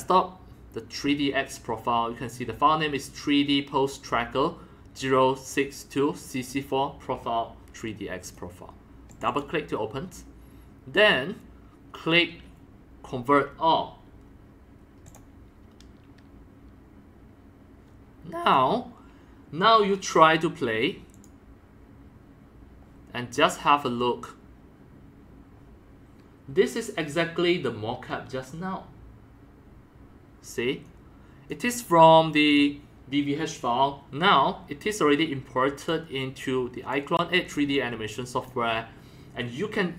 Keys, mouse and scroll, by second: 4.3-4.9 drag, 8.3 click, 8.4 click, 9.1 click, 9.2 click, 15.1-20.4 drag, 15.6 middle click, 21.1 click, 24.4-26.4 drag, 30.9-31.5 drag, 31.5-35.0 drag, 35.8 click, 36.9-37.5 drag, 37.4-38.4 typing, 37.7 click.